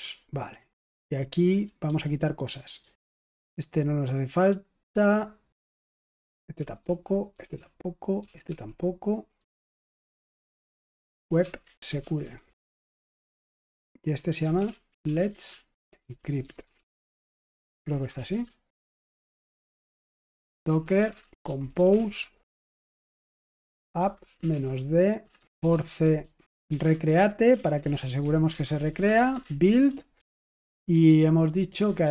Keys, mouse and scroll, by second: 0.5-2.7 typing, 5.6-8.4 typing, 9.6-32.1 typing.